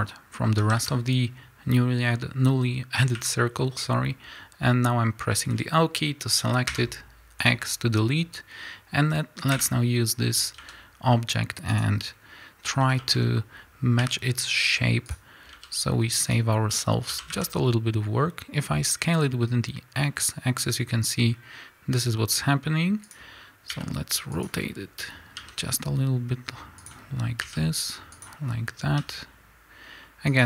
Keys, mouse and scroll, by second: 0.5 a, 3.0 l, 7.4 x, 9.4 l, 9.9 scroll down 2, 10.5 s, 12.0-12.9 scroll up 2, 12.9-15.0 shift+middle drag, 13.9 r, 15.0 click, 15.4 s, 23.0 click, 23.6 r, 25.3 g, 26.8 click, 27.4 r, 28.9 g.